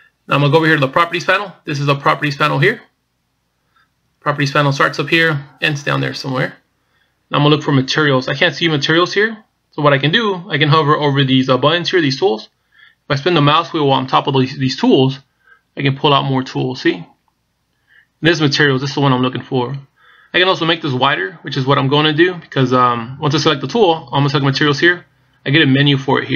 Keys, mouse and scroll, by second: 16.0-16.5 scroll down 2, 16.7-17.8 scroll down 5, 17.8 scroll up 2, 18.4 scroll down 1, 25.4 click.